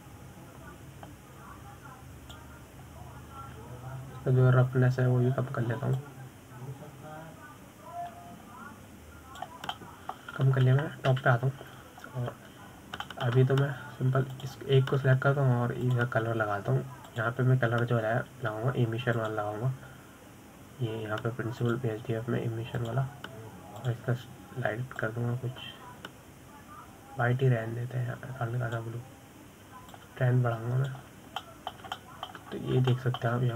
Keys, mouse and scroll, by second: 1.2-2.2 scroll down 2, 2.2-5.5 drag, 7.4-8.3 scroll down 3, 8.3-11.4 drag, 12.1-13.5 middle drag, 13.5 KP_7, 14.1-14.5 scroll up 5, 15.1 scroll down 1, 15.4-15.8 shift+middle drag, 15.8-16.3 scroll up 3, 16.7 click, 18.2-26.3 drag, 32.3-33.5 drag.